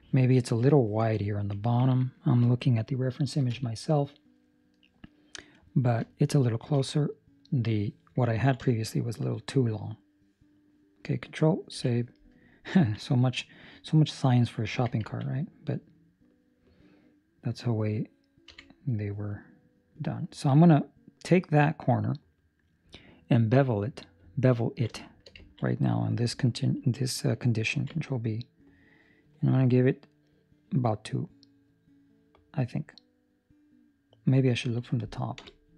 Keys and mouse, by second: 6.6 ctrl+alt+shift+5, 8.3 ctrl+middle click, 8.6 shift+middle click, 8.9 middle click, 9.7 middle click, 10.1 shift+middle click, 11.7 ctrl+s, 12.0 middle click, 12.8 ctrl+middle click, 13.1 right click, 14.0 right click, 14.7 Tab, 15.0 ctrl+middle click, 15.2 middle click, 18.8 right click, 18.8 2, 19.3 middle click, 20.7 middle click, 24.4 ctrl+middle click, 25.0 shift+middle click, 25.5 ctrl+middle click, 25.6 middle click, 27.7 ctrl+b, 35.3 KP_7.